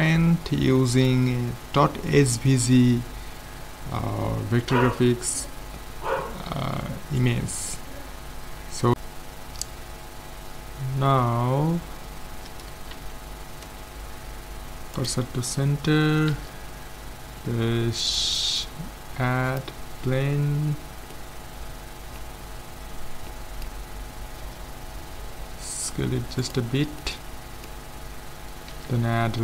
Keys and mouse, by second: 6.3-7.3 middle drag, 7.9-8.9 middle drag, 10.4 middle click, 13.0 shift+s, 16.4 shift+a, 20.7 middle click, 24.5 s, 27.1 middle click, 28.7 shift+a.